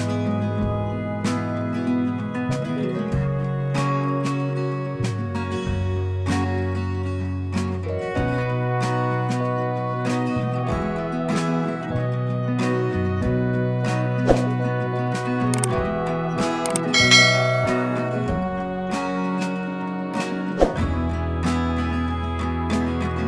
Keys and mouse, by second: 2.5 click, 2.5-5.0 drag, 5.6 click, 5.8 click, 17.6 click, 17.7 click, 19.5 click.